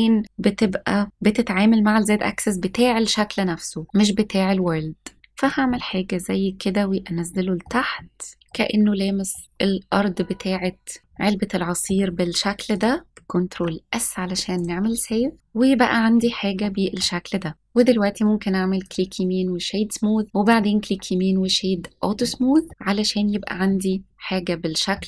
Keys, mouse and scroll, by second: 0.2 right click, 5.3 click, 5.7-7.7 middle drag, 7.9 middle click, 8.4 scroll down 3, 8.4 middle click, 10.1-10.4 scroll up 2, 11.1 middle click, 12.7 click, 13.5 ctrl+s, 14.5 click, 15.3 scroll down 1, 16.1-17.0 middle drag, 16.1 scroll up 3, 17.3 scroll up 1, 17.5 click, 17.7-18.9 right drag, 20.3 right click, 22.1-22.7 middle drag, 23.6 scroll down 1, 23.6-24.9 middle drag.